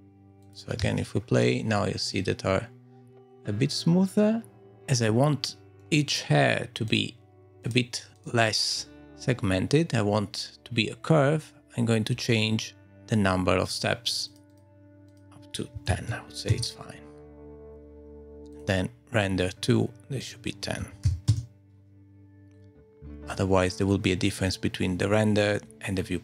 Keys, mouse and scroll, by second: 0.4 click, 0.8 space, 5.8 middle click, 6.9 click, 7.7 click, 12.1-12.9 scroll up 1, 12.9 click, 12.9 scroll up 4, 13.7 click, 18.5 click, 19.5-20.2 scroll down 3, 20.2 click, 20.2-20.5 scroll down 1, 22.5-26.2 scroll down 1.